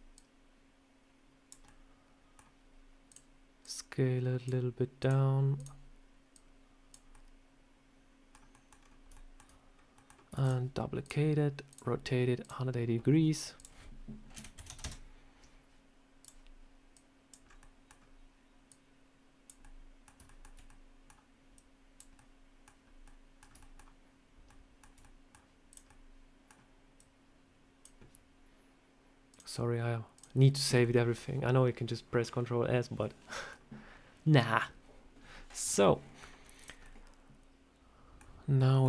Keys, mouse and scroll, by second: 0.0 click, 1.5 middle click, 2.9 click, 3.5 click, 4.9 click, 5.4 click, 6.2 click, 7.0 middle click, 8.4 middle click, 8.6 scroll down 3, 9.0 shift+middle click, 9.1 shift+middle click, 9.6 scroll up 1, 9.8 middle click, 10.2 shift+d, 10.9 click, 11.6 click, 12.3 click, 13.4 click, 16.1 click, 16.8 click, 17.3 scroll up 3, 17.5 middle click, 17.9-18.3 scroll down 1, 18.5 click, 19.5 middle click, 20.1 shift+middle click, 20.5 middle click, 21.4 click, 22.0 middle click, 22.7 scroll up 1, 22.9 middle click, 23.5 shift+middle click, 24.4 middle click, 24.9 middle click, 25.6 click, 25.7 middle click, 26.8 click, 29.2 click, 30.5 scroll down 2, 30.6 scroll up 1, 30.7 middle click, 32.9 middle click, 35.8 scroll down 2, 36.2 scroll up 1, 36.5 click, 36.7 middle click.